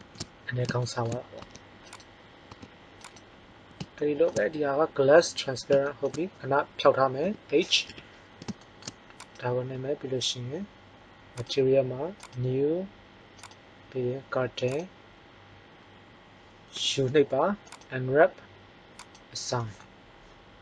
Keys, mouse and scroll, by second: 0.0 shift+z, 1.4 Tab, 2.4 Tab, 7.2 h, 7.8 KP_1, 9.1-10.3 drag, 11.4-14.7 drag, 16.6 u, 19.1-20.2 drag.